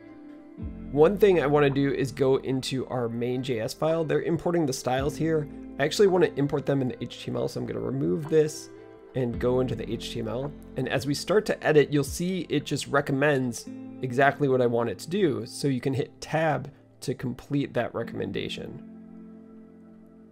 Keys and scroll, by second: 6.0 d, 6.1 d, 9.1 Return, 9.1 typing, 10.2-10.9 typing, 18.6 Tab, 19.7 Escape.